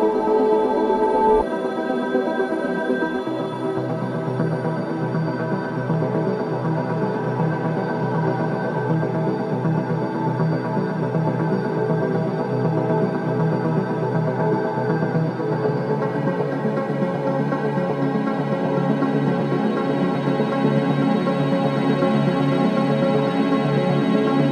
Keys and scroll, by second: 1.9 ctrl+z, 18.4 ,, 20.2 ], 22.1 ].